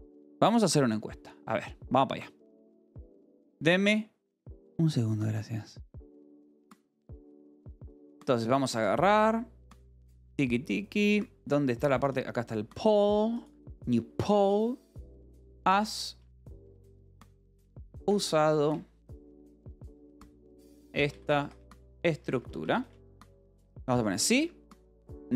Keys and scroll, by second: 15.8-18.7 typing, 19.8-22.6 typing, 24.0 i, 24.3 Tab, 24.9 o.